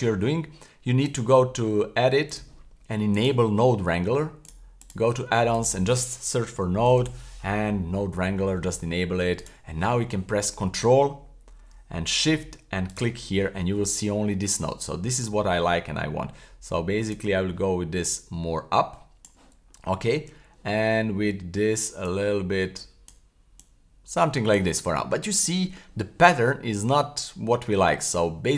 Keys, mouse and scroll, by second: 1.0-1.8 drag, 2.3-3.3 drag, 12.9 ctrl+shift+click, 14.6-15.0 scroll up 1, 15.1 shift+middle click, 15.4 scroll down 1, 17.1-19.3 drag, 19.6-20.2 scroll up 1, 20.3 scroll up 2, 22.0 click, 23.6 click, 24.8-25.3 scroll down 4, 25.4-25.8 middle drag, 26.4-26.9 middle drag, 27.5 middle click, 28.0-28.5 middle drag.